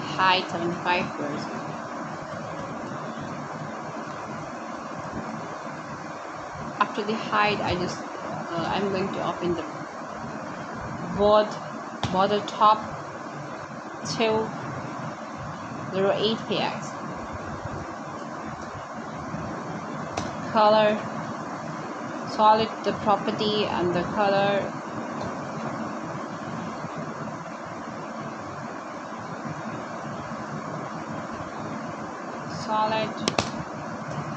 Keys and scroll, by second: 1.3 0, 1.9 8, 2.3 p, 3.1 x, 4.6-6.4 typing, 6.5 Return, 10.1 r, 17.8 space, 18.5 r, 20.0-21.0 typing, 27.9 BackSpace, 29.2 7, 33.2 BackSpace.